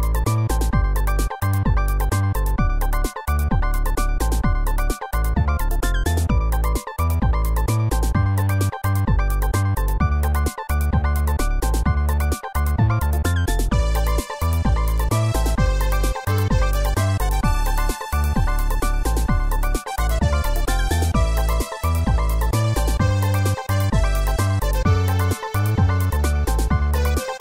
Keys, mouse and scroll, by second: 0.0-1.7 typing, 3.2-4.3 typing, 5.3 ctrl+s, 5.6 click, 6.2 scroll up 1, 7.1 middle click, 7.9 scroll up 1.